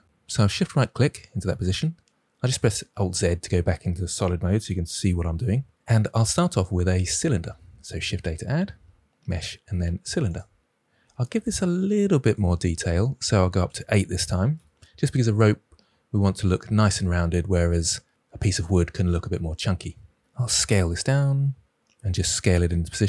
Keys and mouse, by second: 2.5 alt+z, 7.9 shift+a, 12.2-14.5 drag, 20.5 s.